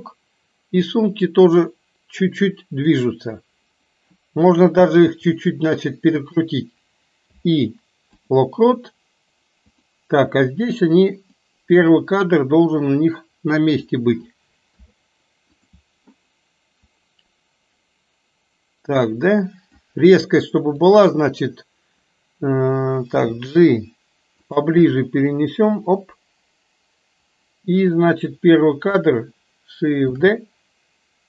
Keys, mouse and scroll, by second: 1.0 click, 1.4-3.2 drag, 5.2 r, 7.3 i, 9.8 click, 11.4 click, 11.7-13.9 drag, 14.8 i, 17.0-20.0 drag, 20.3-20.9 drag, 23.1 g, 25.1-28.0 drag, 30.2 shift+d.